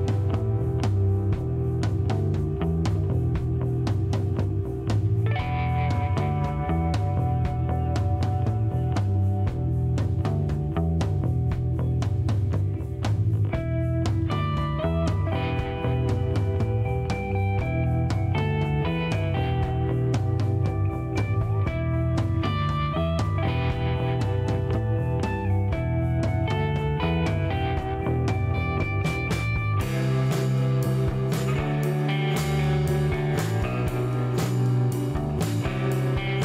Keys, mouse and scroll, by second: 1.0 click, 2.2 middle click, 4.4 click, 6.4 click, 7.6 click, 9.0 click, 11.0-12.6 drag, 13.2 click, 14.4 click, 16.2 2, 18.9 click, 20.4-21.7 drag, 22.4 click, 23.7 Delete, 24.9 click, 25.7 Delete, 27.9 click, 31.5 click, 32.0 click, 32.7 Delete, 33.9 click, 35.5 click.